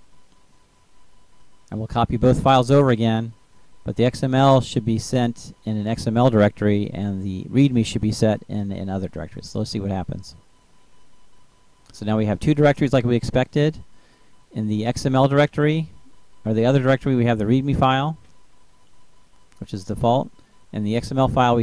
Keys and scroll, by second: 4.1 shift+Up, 5.5 ctrl+c, 7.3 ctrl+v.